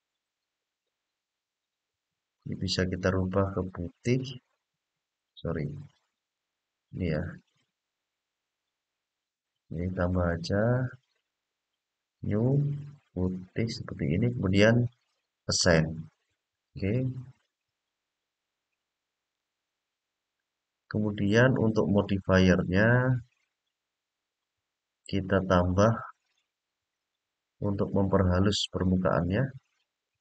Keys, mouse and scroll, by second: 2.1 click, 9.9 click, 11.0 click, 15.3 click, 20.6 click, 22.2-24.8 middle drag, 25.9 click, 26.7 click, 28.3 click, 28.9 click, 29.6 click.